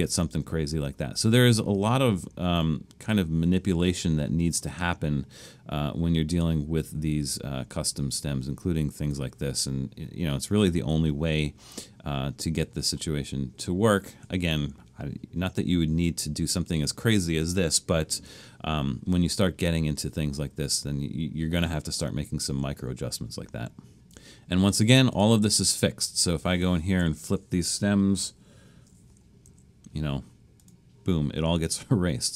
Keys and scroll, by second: 27.2 Left, 27.4 Left, 29.1 |, 29.5 Right.